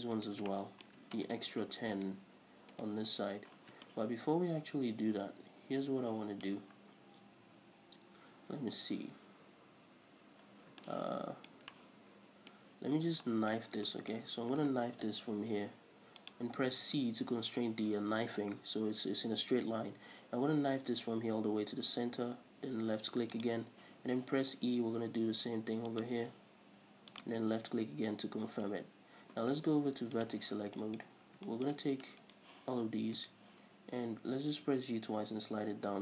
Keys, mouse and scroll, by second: 0.4 shift+right click, 0.7-1.5 shift+middle drag, 1.5 shift+right click, 2.1 shift+right click, 2.9 shift+right click, 3.8 scroll down 1, 4.1-30.4 shift+middle drag, 6.7-9.7 scroll up 2, 9.7-10.7 scroll up 1, 10.7-11.0 scroll down 2, 13.9 scroll down 2, 14.6-15.2 scroll up 2, 15.2 k, 27.6 space, 28.0-30.4 scroll up 2, 30.4 click, 30.8 scroll down 2, 31.0-32.4 shift+middle drag, 31.3 scroll up 1, 32.4 right click, 33.4 ctrl+right click, 34.6 g.